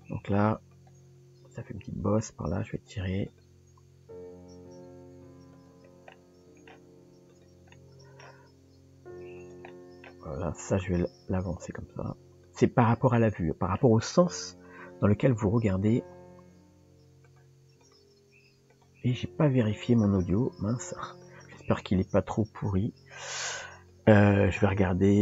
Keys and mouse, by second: 0.8 click, 1.8 g, 3.3 click, 6.1 middle click, 7.7 middle click, 9.7 middle click, 10.6 click, 13.2 middle click, 17.8 click, 19.6 click, 20.1 click.